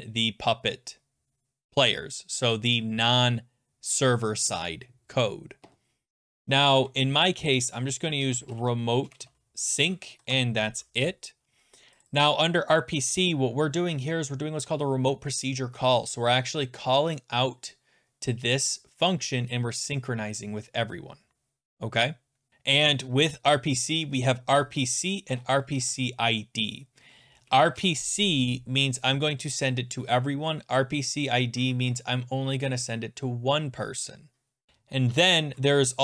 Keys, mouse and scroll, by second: 1.1 click, 1.2 click, 1.2 click, 1.3 click, 2.0 click, 2.0 click, 2.4 BackSpace, 6.4 ctrl+z, 6.7 ctrl+z, 7.5 click, 7.6 click, 8.0-10.3 typing, 11.8 Return, 12.0 click, 12.2 click, 12.4 BackSpace, 12.8-13.2 scroll down 12, 17.2 scroll, 19.1 click, 22.5-22.8 scroll, 23.9 click, 25.2 middle click, 25.3-26.3 typing, 27.3 BackSpace, 27.5 BackSpace, 27.6 BackSpace, 29.2 middle click, 29.3 scroll, 30.0-30.8 scroll, 31.7-32.3 scroll, 33.0-33.7 scroll, 34.7 scroll.